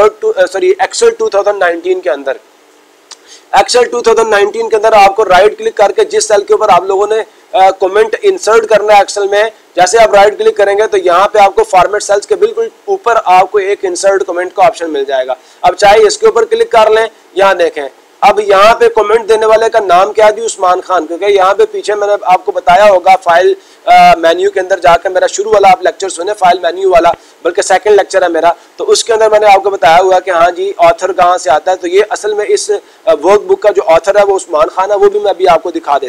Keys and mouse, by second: 15.8-17.0 drag.